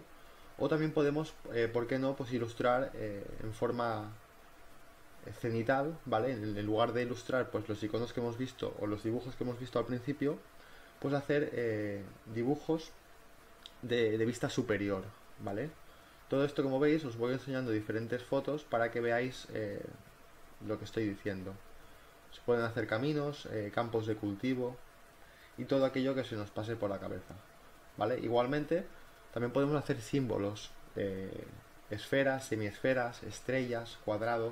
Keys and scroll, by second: 0.2 ctrl+t, 0.4 Return, 0.5 Right, 0.5 Up, 0.7 e, 1.2 v, 3.0 space, 3.4 space, 5.4 [, 5.6 ctrl+z, 5.8 [, 7.5 ctrl+t, 7.8 Return, 7.9 ctrl+t, 8.1 Return, 8.1-11.7 typing, 12.8 ctrl+t, 13.0 Return, 13.2 m, 14.3 ctrl+t, 14.6 Return, 14.7 v, 15.0 m, 15.2 ctrl+z, 15.4 ctrl+t, 16.1 Return, 16.6-19.1 typing, 20.7 ctrl+z, 21.1 ctrl+t, 21.6 b, 23.8 ctrl+z, 24.7 b, 27.9 ctrl+t, 28.2 v, 30.6-33.9 typing, 31.7 ctrl+alt+z.